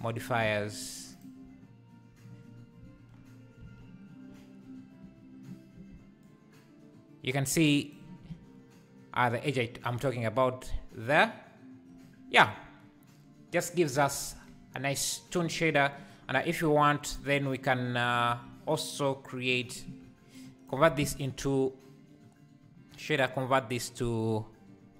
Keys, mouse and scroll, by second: 0.0 ctrl+l, 0.4 alt+a, 0.8-1.2 scroll up 1, 1.2 click, 3.1 ctrl+2, 3.6 alt+a, 6.4-24.9 shift+drag.